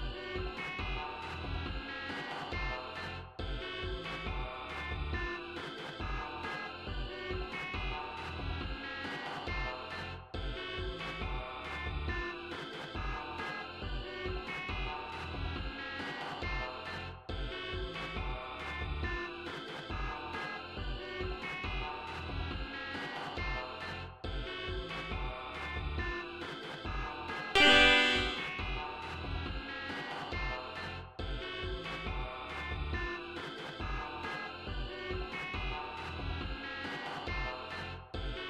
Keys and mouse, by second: 0.9 click, 1.7 click, 3.0 click, 4.0 click, 6.2 click, 7.2 click, 8.9-10.8 typing, 14.2 click, 17.5 e, 26.9 e, 27.4 click, 28.9 right click, 29.6 right click, 31.6 click, 32.8 click, 35.5 click, 36.2 click, 37.5 click.